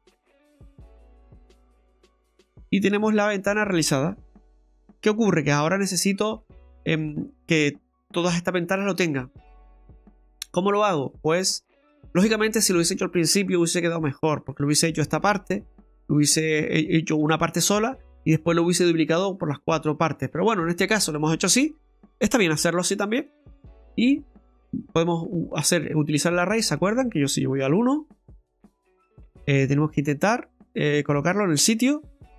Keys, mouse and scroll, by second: 1.3 scroll down 2, 1.5 middle click, 3.0 Tab, 3.2-4.2 scroll down 1, 4.9-5.3 scroll down 2, 5.3 shift+middle click, 5.8 middle click, 6.6 shift+middle click, 7.1 scroll down 2, 7.3 middle click, 8.0 right click, 9.4 scroll down 1, 9.7 middle click, 10.1 right click, 11.5 right click, 12.3 middle click, 18.7 middle click, 20.2 scroll down 1, 20.4 middle click, 23.2 click, 26.8 middle click, 27.6 KP_1, 28.3 scroll up 2, 28.7 shift+middle click, 31.6 click.